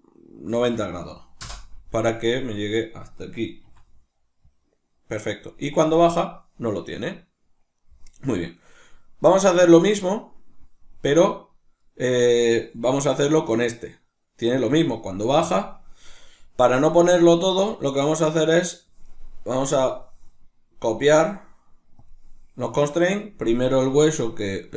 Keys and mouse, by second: 1.7 right click, 3.3 r, 7.5 right click, 9.0 right click, 11.4 right click, 12.7 right click, 18.0 shift+right click, 19.3-24.7 drag.